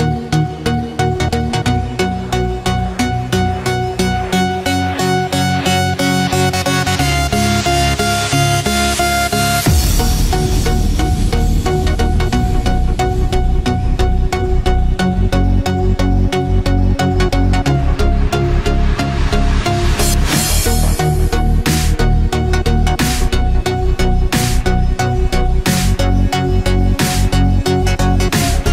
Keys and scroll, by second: 22.4 ctrl+=, 27.7 ctrl+z.